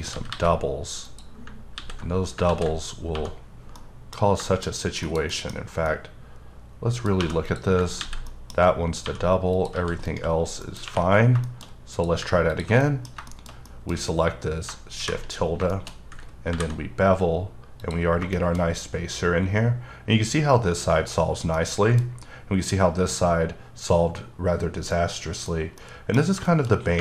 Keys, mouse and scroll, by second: 0.1 g, 0.3 g, 1.0 click, 1.7 ctrl+x, 2.2 scroll down 2, 2.5 ctrl+z, 2.7-3.2 scroll up 2, 3.2 1, 3.8 middle click, 4.7-5.1 scroll up 1, 5.1 KP_Decimal, 5.3 middle click, 5.5 scroll up 1, 5.5 1, 5.9 middle click, 7.2 2, 7.4 click, 8.0 ctrl+x, 8.2 middle click, 8.5-9.1 scroll down 2, 9.1 1, 9.5 click, 9.7 g, 10.0 right click, 10.3 scroll down 2, 10.6 middle click, 10.8 3, 11.1 scroll down 2, 11.4 scroll up 1, 11.4 middle click, 11.6-11.9 scroll down 1, 11.9 click, 12.8 middle click, 13.3 shift+middle click, 13.5 scroll up 1, 13.6 middle click, 14.9 shift+`, 15.3-16.1 scroll up 6, 15.7 shift+middle click, 16.5 b, 17.8 click, 18.1 scroll down 3, 18.3 shift+middle click, 18.6-20.0 shift+scroll up 2, 21.2 scroll up 1, 21.2-21.5 scroll down 3, 21.5 middle click, 22.1-22.6 scroll up 2, 22.7-24.5 scroll up 2, 24.9 middle click, 25.4 scroll down 1, 25.8 middle click, 26.4 double middle click, 26.8 scroll up 2.